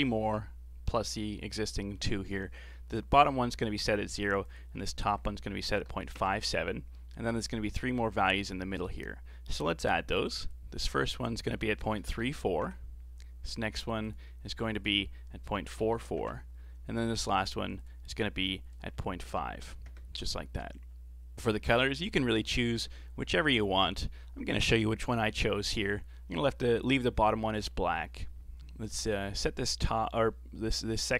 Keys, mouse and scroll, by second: 4.5-7.5 drag, 10.4-15.9 drag, 15.9 KP_4, 17.8-21.3 drag, 21.3 scroll up 5, 21.6-24.6 middle drag, 25.3-25.7 scroll up 3, 25.7-28.7 middle drag, 28.9-31.1 drag.